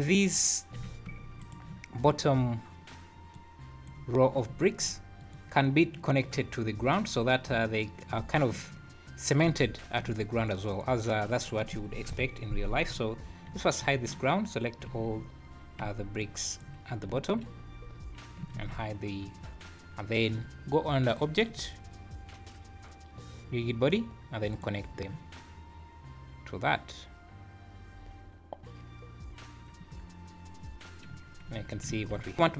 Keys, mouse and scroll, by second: 0.7 g, 3.3 click, 5.2 click, 7.1 scroll up 3, 9.4 w, 10.1 shift+click, 10.3 shift+click, 10.7 shift+click, 11.3 click, 12.0 KP_1, 13.8 h, 14.8 z, 15.8 b, 17.1 `, 17.6 scroll down 1, 18.5 alt+h, 21.0 click, 31.1 scroll down 4, 31.5 z, 32.3 click, 32.3 shift+g.